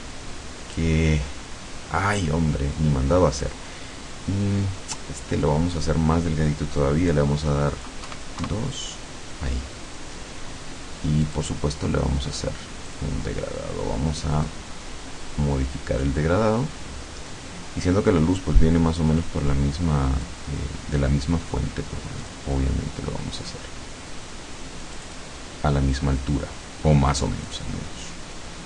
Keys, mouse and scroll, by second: 0.8-2.4 drag, 3.4 click, 8.1 KP_2, 8.4 KP_Enter, 11.3 click, 13.0 click, 14.5-20.5 drag, 22.2 click, 24.8 click, 27.5 click.